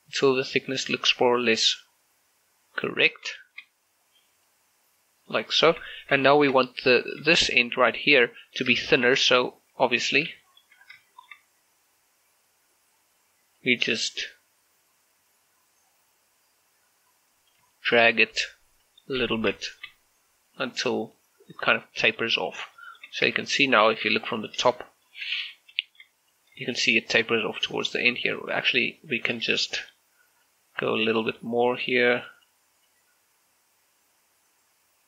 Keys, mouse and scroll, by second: 3.1 scroll down 1, 3.4 shift+middle click, 3.7-4.5 scroll up 1, 4.5 click, 5.6 shift+middle click, 6.6 shift+middle click, 6.7 scroll up 1, 7.4 shift+middle click, 8.4 scroll down 1, 8.8 shift+middle click, 9.2-10.1 scroll up 1, 10.1 right click, 10.5 shift+middle click, 10.9 scroll down 2, 11.1 shift+middle click, 11.4-13.3 scroll up 2, 13.6-15.8 drag, 15.8-17.0 scroll up 2, 17.0-17.7 scroll up 1, 17.9 shift+middle click, 18.3 right click, 18.9 click, 19.5 scroll down 1, 19.7 shift+middle click, 20.0-20.6 scroll up 1, 20.6 right click, 21.7 scroll down 1, 21.9 middle click, 22.4 scroll up 1, 22.8 shift+middle click, 23.3 Tab, 25.1 shift+middle click, 25.5 z, 25.9 shift+middle click, 26.3 right click, 27.8 scroll down 1, 28.1 shift+middle click, 28.4 scroll up 1, 28.6 right click, 29.4 Tab, 30.5-32.4 drag, 32.4 right click.